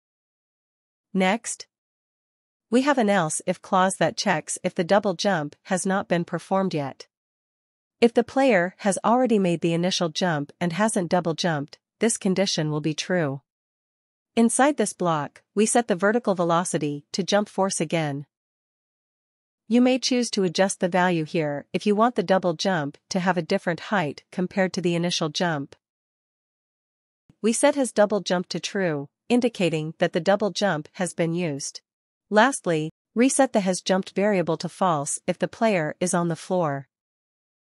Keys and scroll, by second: 2.7 ctrl+s, 3.4 Tab, 4.3-5.6 typing, 7.2-11.4 typing, 11.7 Return, 13.2-17.0 typing, 18.1 Down, 18.7 Return, 20.6-28.3 typing, 30.1 Return, 31.1-33.0 typing, 34.1-36.5 typing.